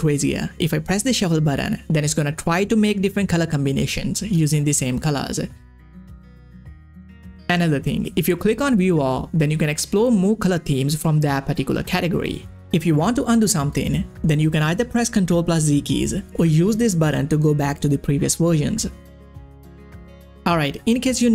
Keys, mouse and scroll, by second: 1.0 click, 6.2 click, 6.2-8.7 scroll down 1, 8.7 click, 9.7 scroll down 1, 10.6-13.1 scroll up 1, 13.1 click, 17.7 click.